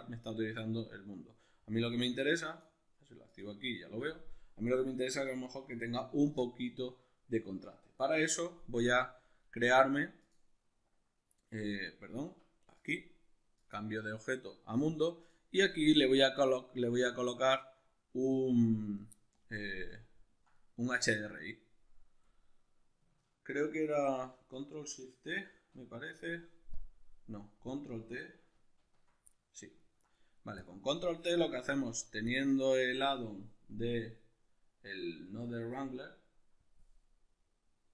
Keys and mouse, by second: 12.3 Escape, 20.0-27.7 ctrl+middle drag, 25.6 ctrl+shift+t, 27.7 click, 28.5 ctrl+t, 29.3-30.6 middle drag, 30.6 click, 31.0 click, 31.7 click, 32.3 click, 33.8-37.9 drag, 35.4 Escape.